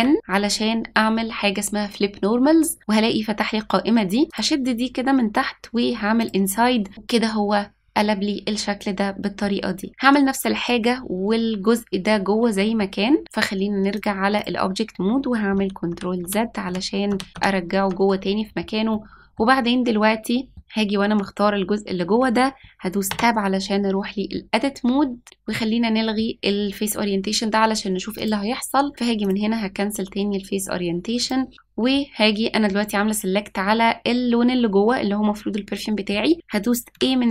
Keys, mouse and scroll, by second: 4.2 click, 6.3 click, 13.9 click, 15.6 ctrl+z, 15.9 ctrl+z, 16.2 ctrl+z, 16.6 ctrl+z, 17.1 ctrl+z, 18.9 middle click, 20.5 middle click, 23.1 Tab, 28.1-31.2 drag, 36.9 a.